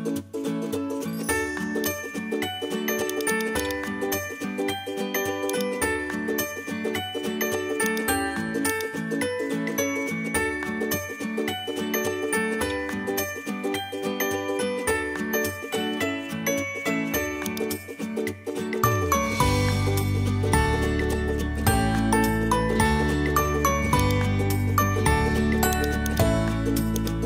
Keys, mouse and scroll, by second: 0.7 middle click, 1.7 shift+a, 1.8 click, 3.1 click, 3.6 click, 3.8 shift+a, 7.4 s, 8.0 g, 9.2 middle click, 9.8 middle click, 10.2 r, 13.6 middle click, 14.8 s, 17.7 middle click, 18.7 middle click, 19.6 s, 24.3 middle click, 25.6 Tab, 26.5 Tab.